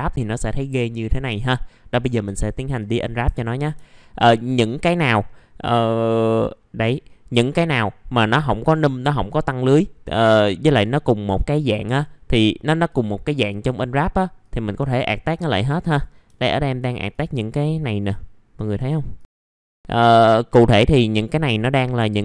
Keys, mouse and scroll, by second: 0.3 click, 0.8-1.9 scroll down 1, 1.9 click, 2.3 alt+middle click, 2.8 middle click, 3.2 F4, 3.7 middle click, 7.6 scroll up 1, 8.2 alt+middle click, 9.0 middle click, 11.9 click, 15.0 alt+middle click, 15.8 click, 16.3 alt+middle click, 17.1 click, 18.1 alt+middle click, 19.1 click, 19.4 alt+middle click, 19.6 scroll down 1, 22.1-22.2 scroll up 1.